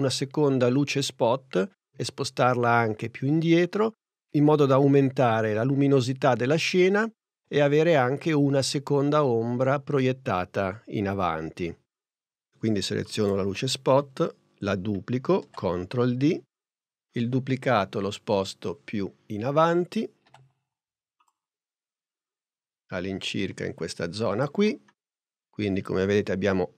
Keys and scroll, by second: 15.5 super+d, 20.1 p.